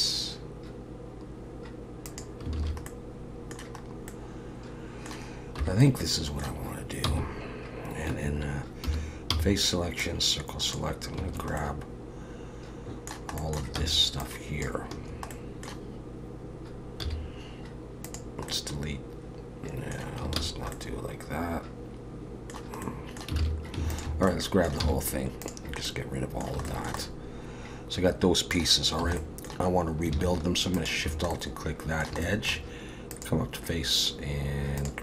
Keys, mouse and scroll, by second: 2.6 alt+a, 2.8 middle click, 3.8 scroll up 2, 4.1 middle click, 5.6 3, 5.8 middle click, 7.0 c, 8.9 3, 9.3 c, 11.6 middle click, 13.4 middle click, 13.8 c, 15.3 middle click, 17.0 x, 18.5 middle click, 20.4 ctrl+z, 20.7 middle click, 22.8 middle click, 23.4 alt+a, 23.9 alt+shift+click, 24.3 middle click, 24.8 x, 25.9 middle click, 26.6 shift+middle click, 27.0 middle click, 29.0 2, 29.2 middle click, 30.8 alt+shift+click, 31.3 middle click, 32.2 shift+middle click, 33.1 click.